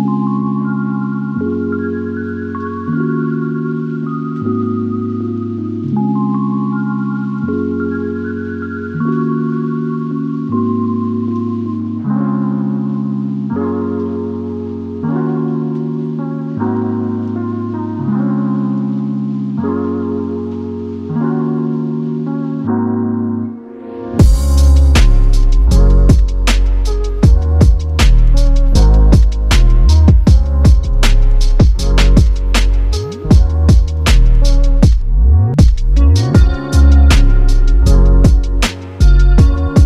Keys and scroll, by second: 1.5 typing, 33.4 y, 39.1 r.